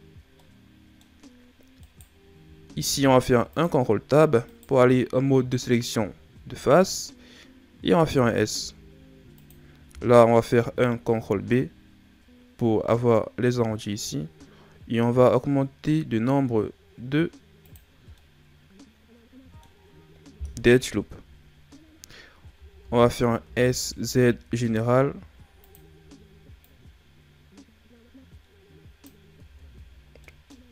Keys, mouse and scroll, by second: 0.3 scroll up 1, 0.3-1.8 middle drag, 1.8 right click, 2.7 ctrl+Tab, 4.4 right click, 6.1-7.1 ctrl+scroll up 1, 7.1-7.9 scroll up 1, 7.9 s, 10.4 ctrl+b, 18.1-21.1 middle drag, 21.2 KP_1, 22.5 a, 22.7 a, 23.4 s, 26.5 click, 29.4 Tab, 29.8-30.2 scroll down 3, 30.2 middle click, 30.6-30.7 scroll up 4.